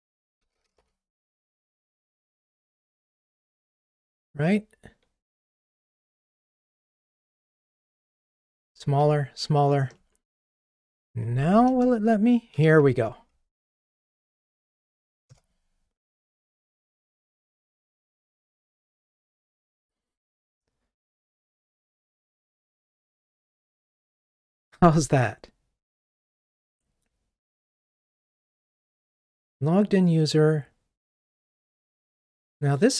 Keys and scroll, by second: 0.4 Delete, 5.3 ctrl+r, 6.9 super+BackSpace, 11.8 alt+Return, 17.2 ctrl+r.